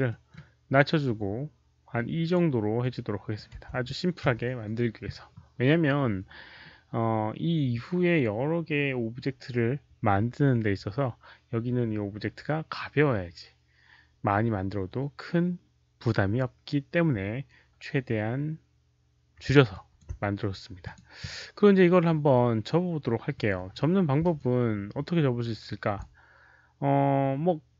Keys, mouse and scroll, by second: 0.0-1.4 typing, 0.0 middle click, 0.2 alt+click, 0.2 alt+right click, 1.4 alt+right click, 1.9 alt+click, 2.7-3.9 typing, 2.7 alt+click, 2.9 middle click, 2.9 alt+right click, 3.3 middle click, 3.3 alt+right click, 4.2 Return, 6.9 click, 6.9 middle click, 14.2 Return, 19.6 alt+click, 20.8 alt+click, 21.1 alt+click, 24.3-25.9 alt+drag.